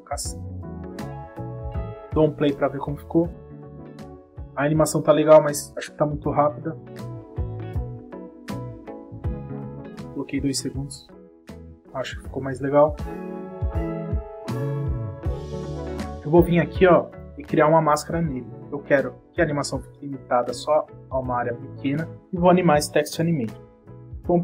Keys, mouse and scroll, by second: 0.9 click, 1.3 space, 3.2 click, 3.6 space, 5.1 click, 17.0 click, 19.0 click, 22.9 click.